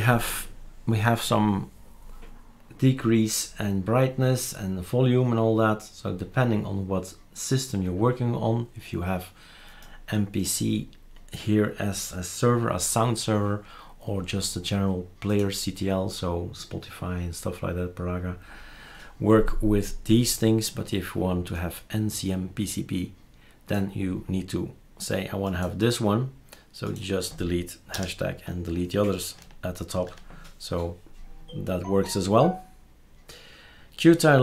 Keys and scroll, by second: 27.9 BackSpace, 29.9 ctrl+z.